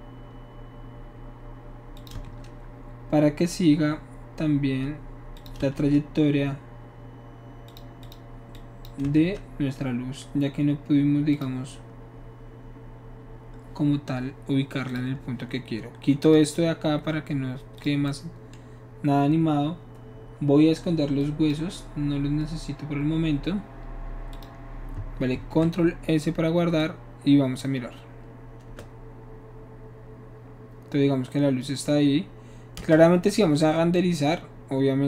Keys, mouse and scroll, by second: 1.9 click, 2.2 shift+d, 5.4 click, 5.9 shift+d, 7.7 click, 8.0 click, 8.5 click, 9.1 shift+d, 11.3 click, 14.9 click, 16.2 click, 17.8 click, 21.2 drag, 24.3 click, 25.3 ctrl+s, 26.8-27.6 drag, 29.0 space, 32.8 space, 33.9-35.0 drag.